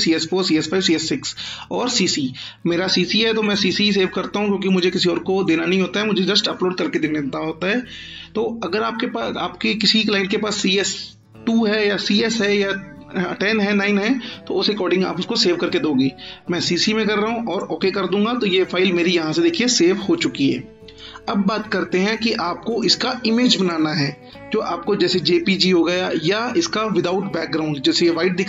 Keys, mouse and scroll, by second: 3.4 click, 16.5 click, 21.9-22.8 click.